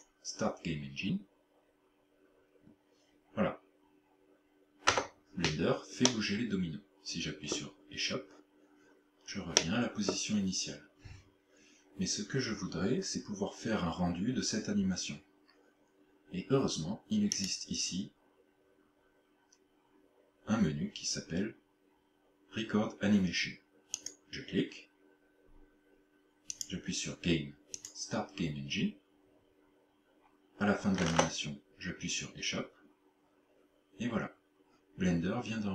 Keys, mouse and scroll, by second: 6.0 middle click, 9.6 middle click, 17.4 click, 26.6 click.